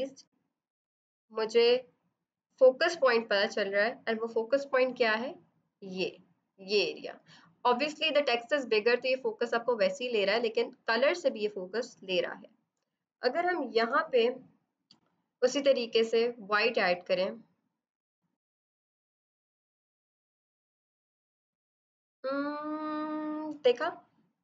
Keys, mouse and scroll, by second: 13.7 b, 15.7 click, 17.2 shift+click, 18.7 click, 18.8 b, 19.0 right click, 19.1 click, 21.0 ctrl+d.